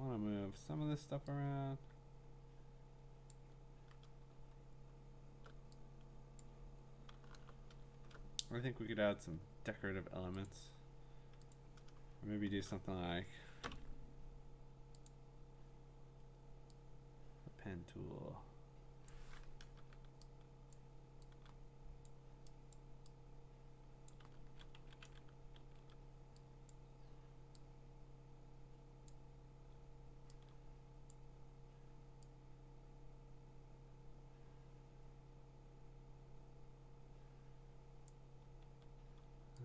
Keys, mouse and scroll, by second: 0.6 v, 3.3 click, 4.6-5.1 scroll, 6.4 click, 7.3 b, 7.8 scroll, 8.6-9.4 scroll, 10.5 click, 11.5 click, 11.5-12.6 scroll, 13.6 p, 15.1 click, 19.1 click, 20.7 ctrl+click, 22.1 click, 22.7 click, 22.9 ctrl+click, 24.1 click, 24.2 ctrl+z, 24.8 ctrl+z, 25.0 ctrl+z, 25.7 ctrl+z, 26.7 click, 29.1 click, 31.1 click, 38.1 click.